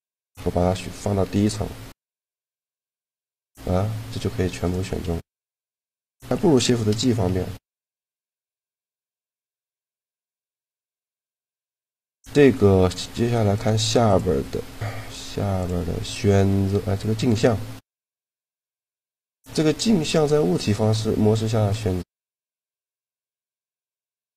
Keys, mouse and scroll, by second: 1.8 click, 2.6 click, 3.2 g, 4.6 click, 7.1 a, 10.2-11.9 drag, 15.3-18.0 drag, 19.8-20.8 drag, 21.3-23.5 drag, 21.3-23.5 right drag.